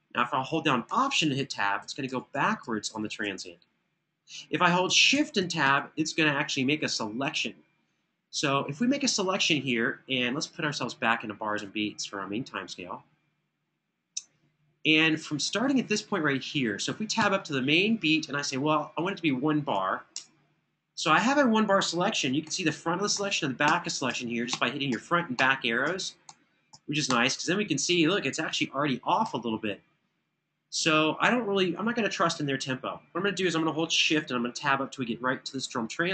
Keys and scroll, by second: 1.2 alt+Tab, 4.7 shift+Tab, 5.4 shift+Tab, 16.9 Tab, 19.4 1, 19.9 Return, 23.4 ⇢, 25.1 ⇢, 26.0 ⇢, 26.8 ⇢, 29.0 super+], 29.5 super+].